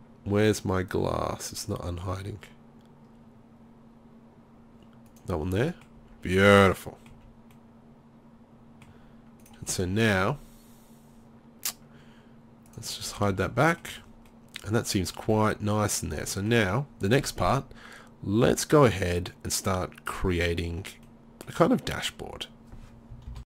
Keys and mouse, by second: 5.6 middle click, 6.0 z, 6.5 z, 7.1 z, 9.4-12.7 right drag, 13.2 z, 14.4-14.9 middle drag, 16.3 middle click.